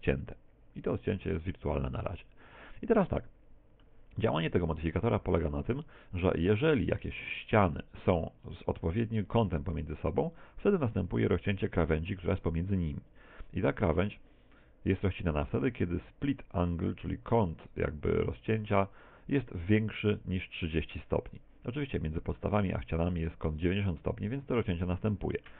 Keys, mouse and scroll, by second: 1.2 middle click, 2.7 scroll down 1, 3.1 middle click, 21.9 middle click, 22.9 middle click, 25.1 middle click.